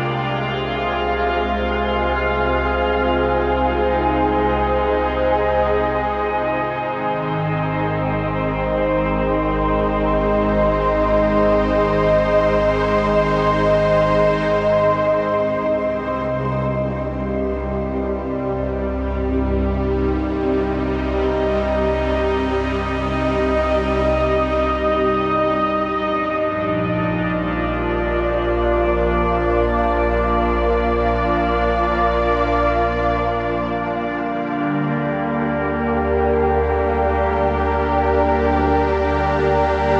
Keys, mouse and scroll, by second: 4.6 shift+click, 6.6 scroll down 1, 6.8 z, 7.2 click, 7.5 click, 7.7 z, 7.8 click, 11.7 click, 16.7 shift+Right, 17.7-19.5 drag, 19.5 shift+Left, 24.0-25.6 typing, 24.3 click, 25.1 click, 25.4 click, 27.3-30.0 alt+drag, 34.9 z, 35.2 click, 35.4 space, 35.6 click, 39.4 right click, 39.5 right click.